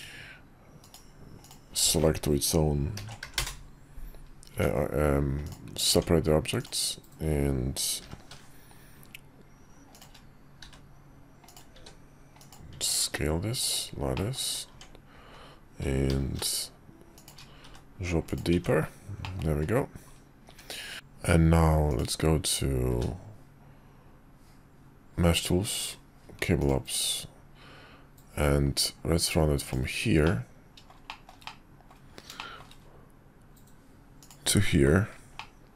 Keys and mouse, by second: 0.8 click, 1.4 click, 2.9 ctrl+l, 3.2 p, 4.5 Tab, 5.4 click, 5.9 Tab, 8.0 i, 10.6 e, 11.7 s, 12.7 Tab, 13.7 middle click, 14.1 middle click, 14.7 Tab, 16.1 i, 17.6 e, 18.5 Tab, 19.2 middle click, 20.5 `, 20.9 q, 21.9 click, 22.9 q, 30.2-35.7 middle drag.